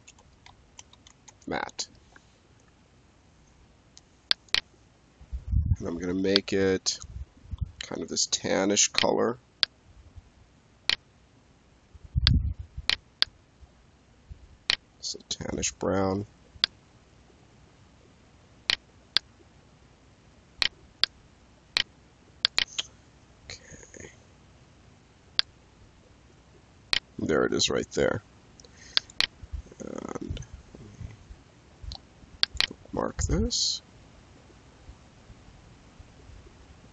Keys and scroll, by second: 0.0-1.7 typing.